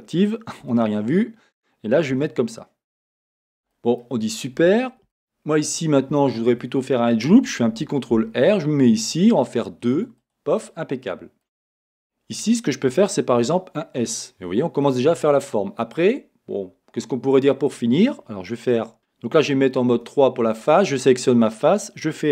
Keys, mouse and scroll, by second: 0.6 g, 3.5 click, 4.3 scroll, 5.8-6.2 scroll, 9.7 ctrl+r, 10.3 click, 10.7 middle click, 12.0-13.4 scroll, 13.4 right click, 13.4-14.9 middle drag, 13.4 s, 14.9 click, 15.3-19.0 middle drag, 16.1-17.0 scroll, 19.0 a, 20.0 3, 20.8 click.